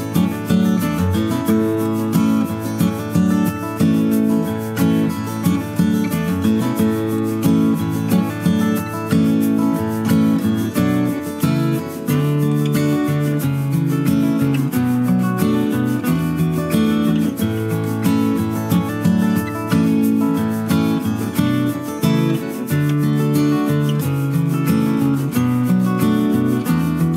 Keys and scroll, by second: 5.9 ctrl+a, 11.4 Up, 13.3 Right, 14.5 Left, 15.7 Left, 18.3 ctrl+=.